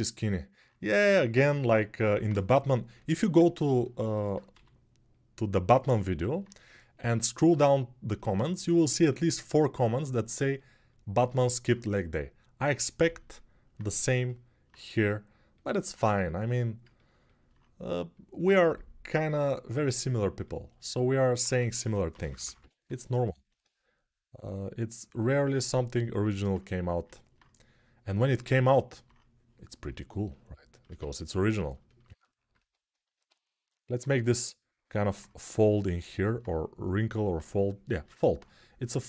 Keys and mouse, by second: 2.4 g, 4.3 g, 14.2-20.7 alt+right drag, 21.2 1, 21.9 [, 22.0 [, 22.3 [, 24.9-26.3 alt+drag, 26.3-30.6 right drag, 30.6-39.0 ctrl+alt+drag.